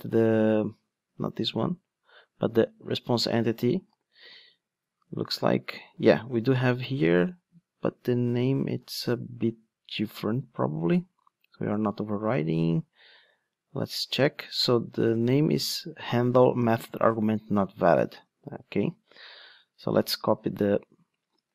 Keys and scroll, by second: 3.9 super+f, 4.2 super+v, 8.7 super+f, 9.1 super+v.